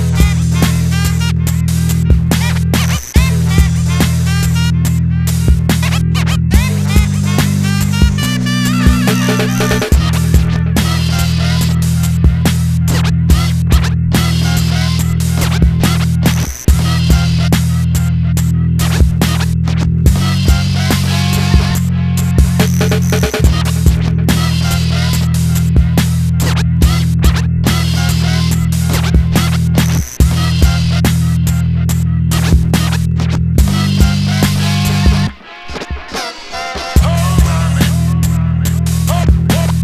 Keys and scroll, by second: 19.7 ラ, 22.2 8.